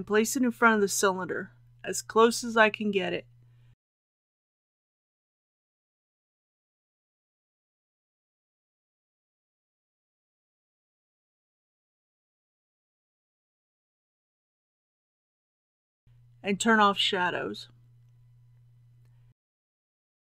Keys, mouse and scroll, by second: 1.8 r, 1.8 z, 2.1 KP_9, 2.2 KP_0, 3.4 KP_7, 4.4 g, 4.6 y, 6.2 click, 6.7 g, 7.7 x, 11.7 click, 12.2 g, 12.4 y, 15.8 KP_1, 16.0 click, 16.9-17.5 scroll down 1, 19.7 click.